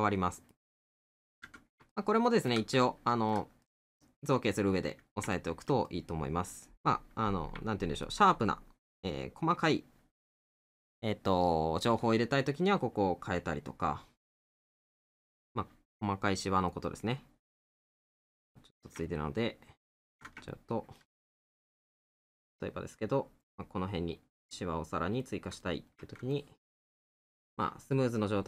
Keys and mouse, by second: 1.3 middle click, 5.3 middle click, 7.7 middle click, 16.0 middle click, 19.1 middle click, 20.5 middle click, 21.8 right click, 24.5 middle click.